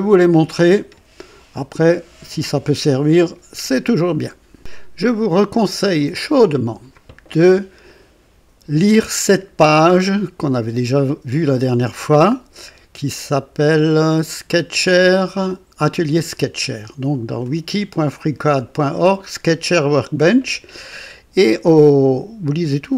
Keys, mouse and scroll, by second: 6.0 click, 14.0-17.7 drag, 21.8-22.9 drag.